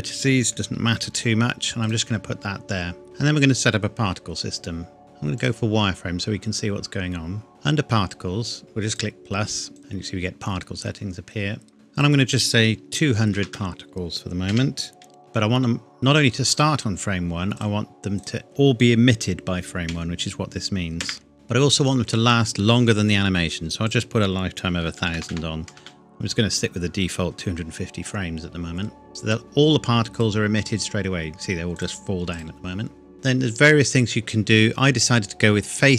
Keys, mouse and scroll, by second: 1.8 click, 2.3-2.6 scroll down 1, 3.6-4.8 scroll up 1, 4.8 scroll down 1, 5.0 shift+middle click, 5.4 click, 8.8 click, 11.9 click, 16.5 click, 19.9 KP_1, 21.0 KP_Enter, 23.8 click, 24.7 KP_1, 25.0 KP_0, 25.8 KP_Enter, 30.1 click, 33.1 scroll down 1.